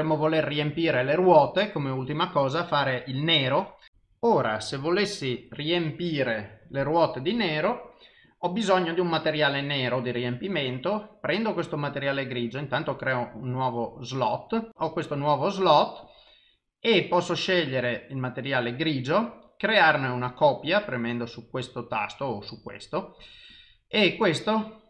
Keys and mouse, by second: 12.6 click, 14.7 click, 16.1 click, 22.5 click, 23.5 click.